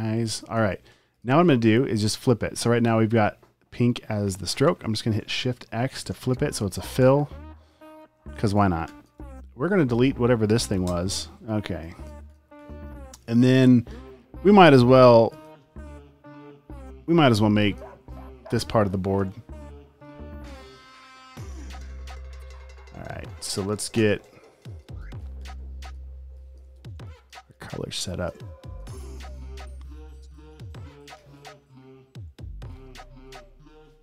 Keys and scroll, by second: 0.4 space, 6.1 x, 8.9 space, 9.2 v, 11.0 BackSpace, 12.6 space, 13.2 space, 15.7 r, 18.1 space, 18.6 super+space, 19.2 space, 20.6 p, 24.0-29.4 typing, 31.3 p.